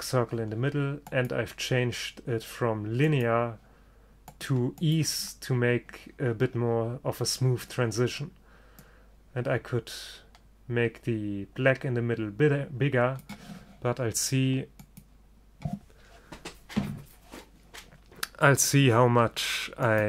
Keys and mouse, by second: 1.2-3.1 drag, 4.4-6.3 drag, 9.0-10.7 drag, 14.9-16.8 drag.